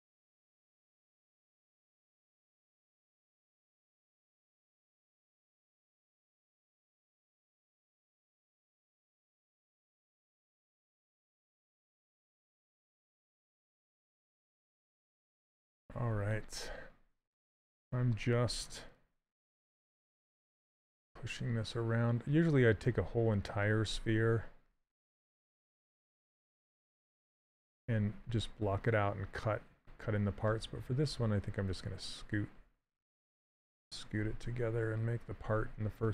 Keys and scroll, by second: 19.4 s, 24.1 ctrl+z, 27.4 ctrl+z, 27.8 s.